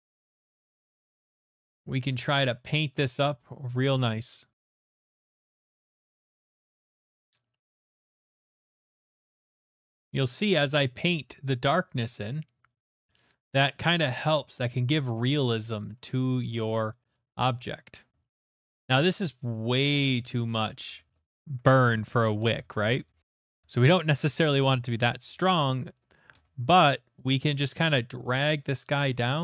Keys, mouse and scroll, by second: 0.2 right click, 0.5 alt+right click, 1.1 middle click, 1.7 alt+right click, 3.0 click, 4.4 alt+scroll, 4.5 click, 4.6 click, 4.9 click, 5.1 click, 5.7 scroll, 6.3 click, 6.3 middle click, 6.6 click, 7.2 middle click, 7.5 middle click, 8.2 middle click, 8.4 middle click, 8.7 middle click, 8.8 alt+middle click, 8.9 click, 9.1 click, 9.9 click, 9.9 middle click, 10.1 alt+middle click, 10.7 shift+middle click, 10.7 click, 11.1 click, 12.3 click, 14.1 middle click, 14.6 click, 14.9 click, 15.6 click, 16.2 middle click, 16.6 click, 16.9 click, 17.1 click, 17.7 middle click, 18.2 shift+middle click, 18.6 click, 19.2 click, 19.8 middle click, 19.9 ctrl+z, 21.1 middle click, 21.6 shift+middle click, 22.6 ctrl+z, 23.2 ctrl+z, 23.8 ctrl+z, 25.1 ctrl+z, 26.1 ctrl+z, 26.4 ctrl+z, 27.9 ctrl+z, 28.1 ctrl+z, 28.4 ctrl+z, 29.0 middle click, 29.3 ctrl+z.